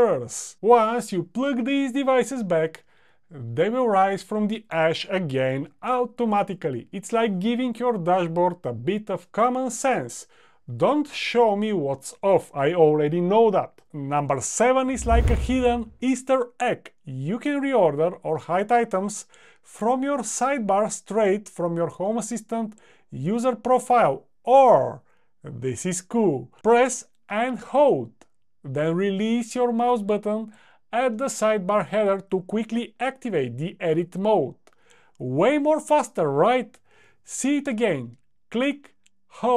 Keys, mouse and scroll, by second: 1.2 click, 4.3 click, 6.2 click.